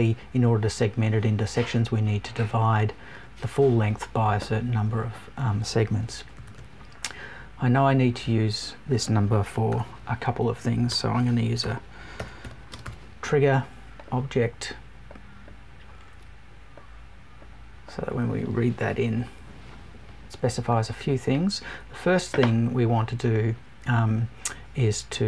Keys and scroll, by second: 12.1 BackSpace, 19.1 Right.